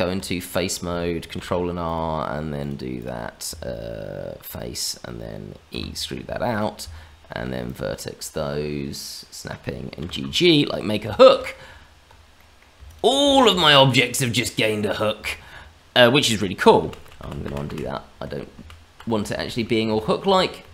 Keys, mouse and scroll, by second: 0.3 middle click, 1.3 ctrl+r, 2.9 click, 3.4 Tab, 4.7 click, 5.7 e, 6.8 Tab, 7.6 click, 9.0 click, 9.9 g, 10.8 scroll down 2, 11.1 shift+middle click, 11.6 Tab, 12.3 middle click, 12.8 shift+click, 13.4 shift+middle click, 13.6 scroll up 1, 13.9 middle click, 15.2 middle click, 16.7 ctrl+z, 17.0 ctrl+z, 17.1 ctrl+z, 17.4 ctrl+z, 17.6 ctrl+z, 18.5 ctrl+z, 19.4 ctrl+z, 19.8 ctrl+z, 20.1 ctrl+z, 20.6 ctrl+z.